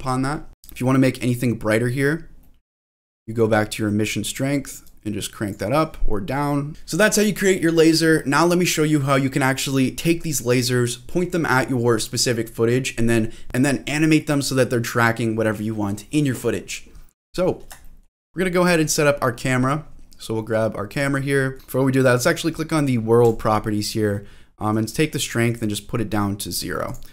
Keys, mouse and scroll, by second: 0.4-1.8 scroll up 3, 1.8-2.4 scroll up 3, 2.4 middle click, 3.2 middle click, 4.8 click, 6.4 click, 6.7 shift+middle click, 17.2 middle click, 17.8 shift+middle click, 18.4 scroll down 2, 18.7 middle click, 18.9 scroll down 1, 19.2-20.8 scroll up 2, 20.9 click, 21.3 middle click, 21.5 scroll up 1, 23.2 click, 24.7-26.5 drag, 26.8 click.